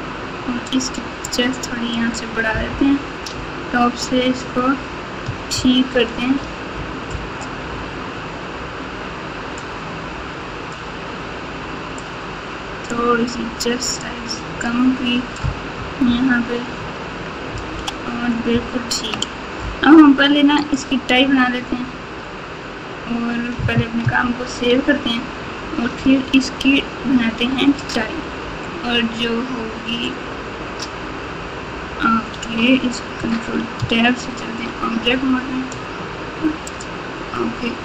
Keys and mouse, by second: 1.2 click, 2.6 KP_7, 5.5 ctrl+KP_8, 6.0 ctrl+KP_8, 9.6-10.7 drag, 11.9 click, 14.0 click, 16.0 KP_1, 17.5 KP_Subtract, 17.7 KP_Subtract, 18.5 ctrl+KP_2, 19.0 ctrl+KP_2, 19.1 ctrl+KP_2, 20.6 click, 21.5 Tab, 22.2 Tab, 24.5 ctrl+s, 31.8 Tab, 32.3 Tab, 33.7 ctrl+Tab, 36.7-37.8 drag.